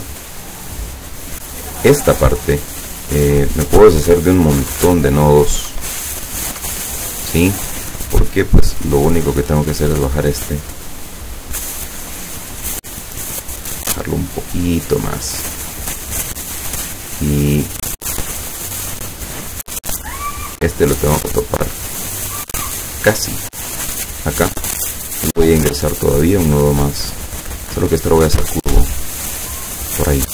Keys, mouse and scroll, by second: 0.7 click, 1.5 click, 3.7 click, 4.7 Delete, 5.4 click, 5.7 Delete, 6.4 click, 6.6 Delete, 8.8-10.1 drag, 10.5-13.2 drag, 13.7-16.4 drag, 20.6-24.4 drag, 25.8 click, 26.5 click, 28.3 click.